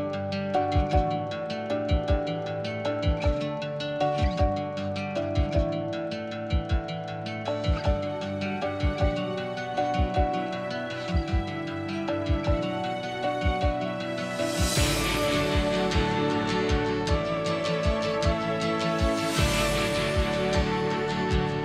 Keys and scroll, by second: 15.2 2, 17.4 1, 18.6-19.5 typing, 21.3 typing.